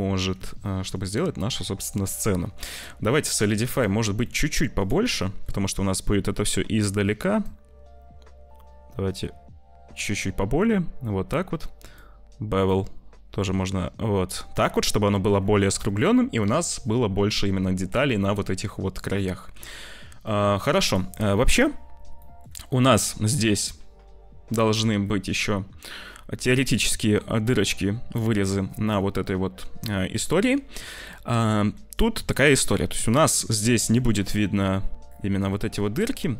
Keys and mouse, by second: 2.7-4.7 middle drag, 5.1 shift+middle click, 6.0 middle click, 7.3-9.9 shift+middle drag, 11.8-14.1 shift+drag, 14.4 middle click, 16.4 click, 18.5 middle click, 18.9 click, 19.0 middle click, 19.5 ctrl+s, 20.2 shift+click, 20.8 click, 22.1 click, 22.7 middle click, 30.3-31.6 drag, 33.2 click, 33.9 click.